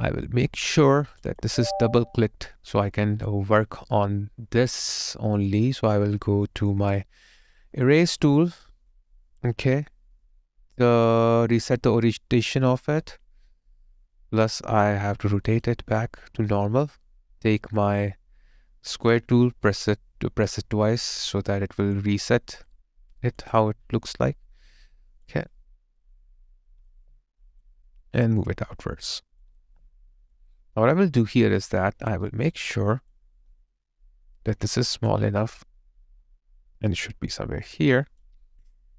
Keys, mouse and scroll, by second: 1.3 double click, 3.3 alt+click, 15.5 ctrl+click, 23.5 alt+click, 30.6 alt+right click, 31.6 alt+click, 32.7 alt+click.